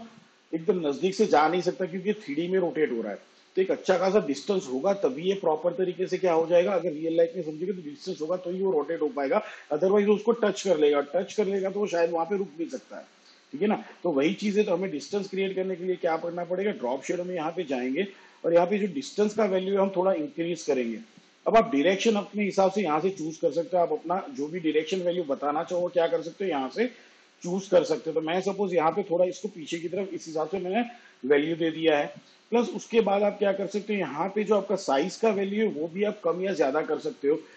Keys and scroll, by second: 36.3 7.